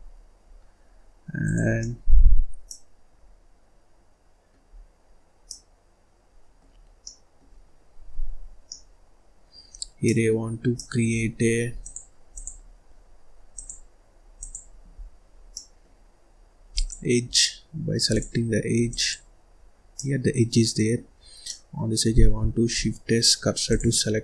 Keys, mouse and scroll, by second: 0.0 scroll up 1, 0.4 scroll down 2, 1.4 click, 1.7 middle click, 2.2-2.6 scroll up 1, 2.6-4.6 middle drag, 4.6 scroll down 3, 4.9-5.4 scroll up 2, 5.4-6.9 middle drag, 6.9 scroll down 1, 7.0-8.4 middle drag, 8.4 scroll up 2, 8.5 scroll down 1, 8.7-9.7 middle drag, 9.7-10.1 scroll up 2, 10.1-11.7 middle drag, 11.7-14.9 drag, 14.9 scroll down 1, 15.2 scroll up 1, 15.5-16.7 middle drag, 16.7 click, 18.1 click, 18.8 click, 19.9-22.8 middle drag, 22.8 shift+s.